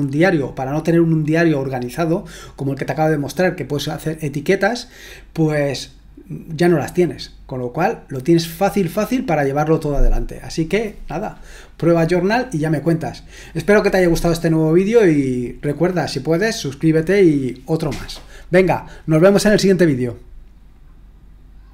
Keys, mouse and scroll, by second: 21.6 click.